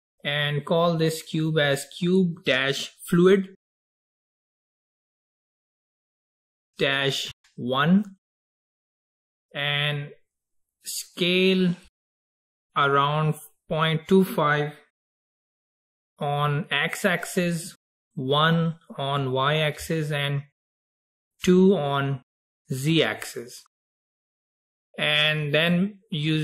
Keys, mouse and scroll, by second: 1.2 click, 1.4-4.6 drag, 11.3-14.5 drag.